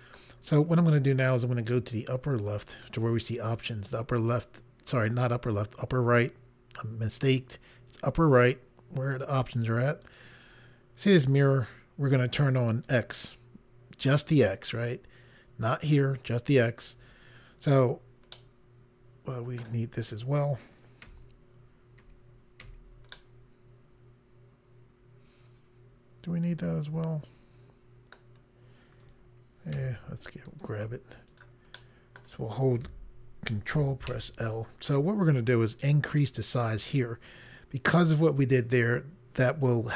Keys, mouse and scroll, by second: 10.1 click, 12.7 click, 18.4 middle click, 21.1 i, 22.0 i, 22.7 i, 23.2 middle click, 29.8 c, 30.5 click, 31.4 right click, 31.8 middle click, 35.4 ctrl+i.